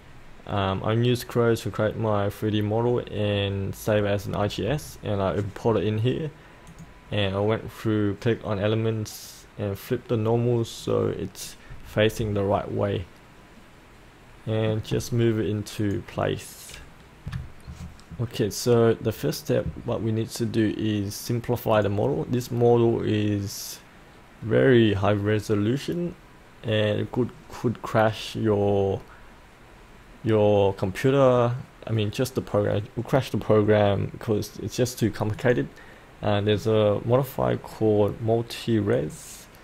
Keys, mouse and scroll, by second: 6.7 click, 12.3-14.7 alt+middle drag, 15.8 click, 17.2 F8, 21.7 click, 36.5-38.9 scroll down 1, 38.9 click.